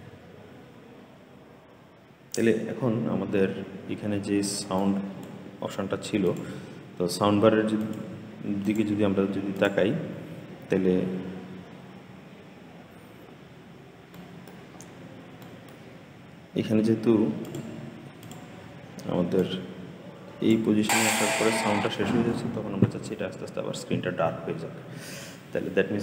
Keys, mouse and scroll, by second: 4.6-10.9 drag, 10.9-11.8 scroll up 1, 11.8-12.9 scroll down 8, 12.9-13.9 scroll up 13, 14.0 middle click, 14.6-15.3 scroll up 10, 15.3 middle click, 15.9-17.3 scroll up 4, 17.3 click, 18.1 click, 19.3-20.7 drag, 20.7 space, 21.7 space.